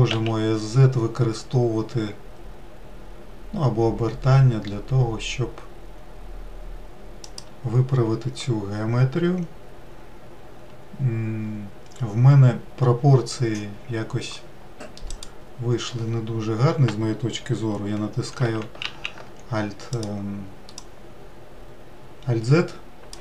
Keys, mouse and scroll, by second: 14.5-17.7 drag, 17.8 alt+x, 18.3 alt+z, 19.4 click, 20.3 click, 23.0 ctrl+click.